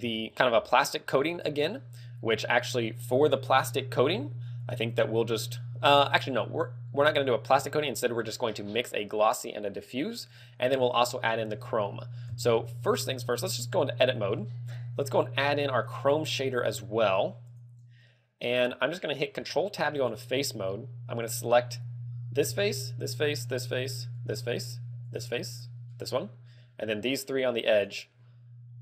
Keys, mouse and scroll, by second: 0.2 shift+middle click, 0.7 scroll up 2, 1.7 scroll up 2, 6.4 click, 7.9 scroll up 5, 8.2 shift+middle click, 13.1 Tab, 14.7 a, 15.8 click, 16.3 click, 16.9 click, 18.3 click, 19.7 ctrl+Tab, 20.5 ctrl+Tab, 22.0 right click, 23.2 shift+right click, 23.8 shift+right click, 24.6 shift+right click, 25.7 shift+right click, 26.3 shift+right click, 27.6 shift+right click, 28.2 shift+right click.